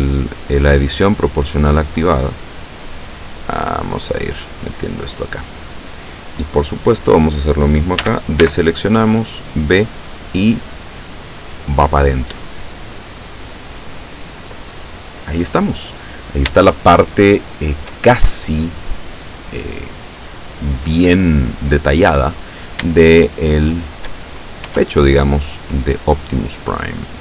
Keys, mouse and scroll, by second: 8.1 a, 8.5 b, 8.7-9.8 drag, 10.4-14.3 drag, 15.9-16.3 scroll down 2, 16.7-18.1 shift+middle drag, 20.0-20.6 scroll up 4, 23.1-25.3 shift+middle drag, 24.7 Tab, 25.8 right click, 26.5-27.2 middle drag.